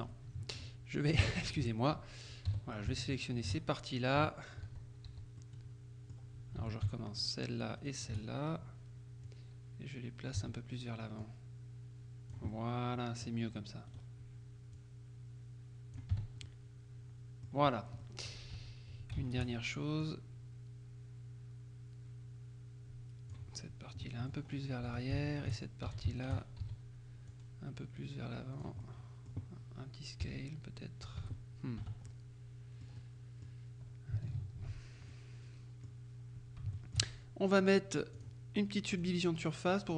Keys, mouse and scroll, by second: 0.3 middle click, 1.4 alt+shift+right click, 2.6 z, 3.3 alt+shift+right click, 4.3 KP_3, 4.7 z, 5.5-6.7 middle drag, 6.7 a, 7.5 alt+shift+right click, 9.3-10.9 drag, 10.5 z, 11.3-12.9 drag, 12.6 middle click, 14.0 right click, 14.8-16.5 drag, 16.2 Tab, 17.7-18.1 scroll down 1, 18.1 middle click, 18.6 Tab, 19.4 alt+shift+right click, 20.1-23.9 drag, 24.1 middle click, 24.5-25.1 scroll up 1, 25.0 z, 25.4 alt+shift+right click, 26.0 alt+shift+a, 26.3 alt+shift+right click, 26.7 alt+shift+z, 27.4-28.9 drag, 28.9 middle click, 30.3 s, 31.3 Escape, 32.1 Tab, 32.1-33.4 middle drag, 35.2-36.4 ctrl+drag, 36.9 shift+click, 38.3 click, 39.0 click, 39.8 click.